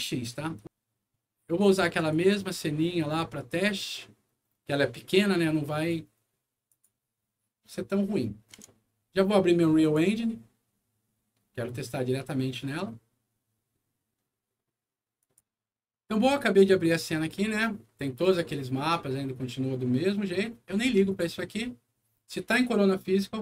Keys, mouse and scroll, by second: 1.8 click, 5.7 click, 6.6 click, 9.8 click, 15.1 click, 18.2 click, 21.0 click.